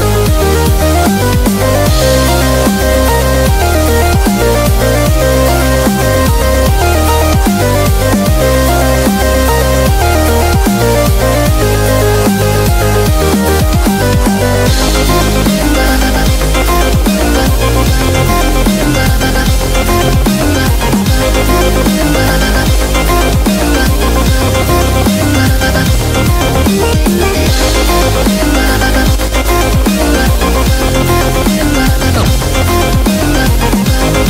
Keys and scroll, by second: 1.0 typing, 11.3 super+=, 11.4 super+=, 11.9-13.2 typing, 18.1-19.0 typing, 22.2-23.3 typing, 28.5-29.9 typing.